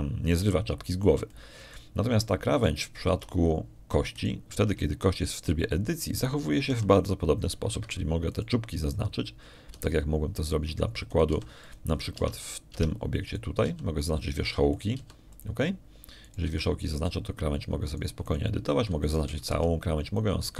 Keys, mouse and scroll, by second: 0.0 middle click, 0.6 click, 1.7-3.8 drag, 4.1 shift+click, 5.0 shift+Tab, 6.0 right click, 6.4 Tab, 8.6 r, 9.6 Escape, 10.2 right click, 11.6 g, 12.2 click, 13.0 right click, 13.2 g, 13.5 click, 14.0 Tab, 14.4 right click, 14.6 Tab, 15.2 right click, 15.5 g, 15.9 click, 16.6 right click, 16.8 g, 17.2 click, 18.1 right click, 18.3 g, 18.8 click, 19.8 right click.